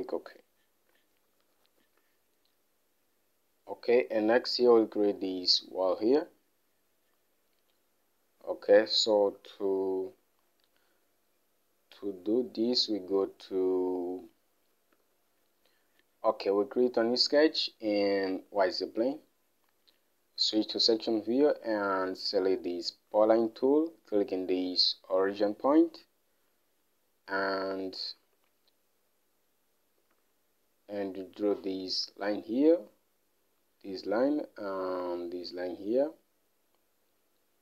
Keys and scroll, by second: 1.8 Home, 2.4 alt+Tab, 15.5 alt+Tab, 28.6 alt+Tab, 30.7 alt+Tab.